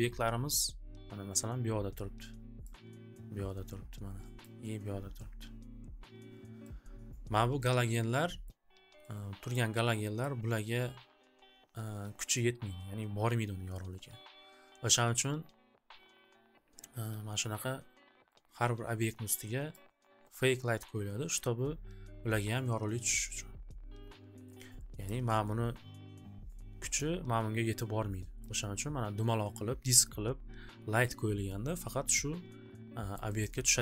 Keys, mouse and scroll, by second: 6.6 click, 8.4 click, 10.3 click, 19.8 click, 21.3 click, 25.2 click, 27.1 click, 28.4 click, 33.1 click, 33.4 click.